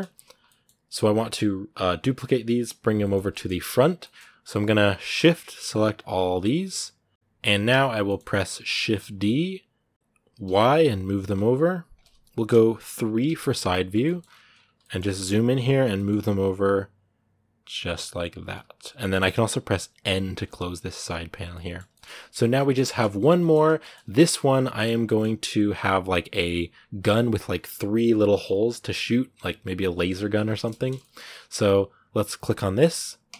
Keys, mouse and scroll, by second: 0.2 scroll up 1, 0.2-3.4 middle drag, 3.4-3.8 scroll up 1, 3.8-5.8 shift+middle drag, 5.8-7.9 shift+right drag, 7.9 middle click, 8.6 shift+d, 13.0 KP_3, 13.8 shift+middle click, 14.0 shift+scroll up 3, 14.6 shift+middle click, 15.1 scroll up 2, 15.7 g, 20.1 n, 20.9 scroll down 5, 21.3 middle click, 22.3 scroll down 2, 22.6 shift+middle click, 22.9 scroll up 2, 23.2-24.7 middle drag, 24.7 scroll up 2, 24.8-30.0 shift+middle drag, 30.0 scroll up 1, 30.3 shift+middle click, 30.7 shift+scroll down 1, 30.8 shift+middle click, 31.0-31.4 scroll up 2, 31.4-33.1 right drag, 33.1 KP_Decimal.